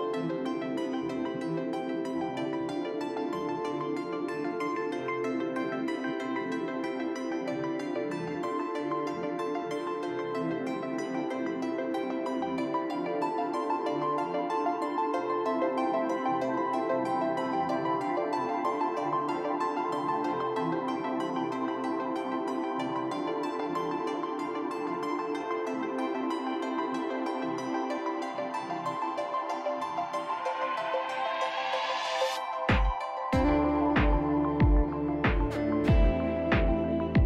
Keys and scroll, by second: 2.3 Delete, 5.3 Delete, 8.2 shift+r, 8.6 shift+r, 9.6 r, 10.7 shift+r, 11.3 shift+r, 12.0 s, 16.2 ctrl+z, 16.4 ctrl+z, 20.7 s, 23.4 F4, 25.3 F4, 33.0 s, 35.3 s, 36.6 F4.